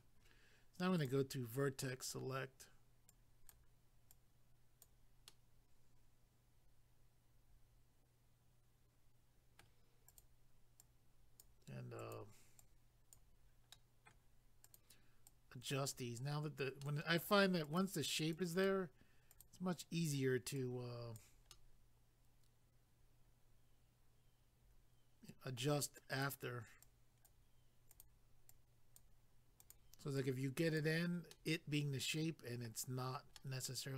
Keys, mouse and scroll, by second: 1.0 click, 2.0 click, 3.1 click, 4.1 click, 5.3 middle click, 10.1 click, 10.8 click, 12.0 click, 12.6 click, 13.7 middle click, 14.6 click, 15.3 click, 16.8 middle click, 17.6 click, 18.3 click, 19.3 click, 20.6 click, 21.5 middle click, 26.1 click, 26.8 click, 27.9 click, 28.5 click, 29.6 click, 30.2 click, 31.3 middle click, 33.3 middle click.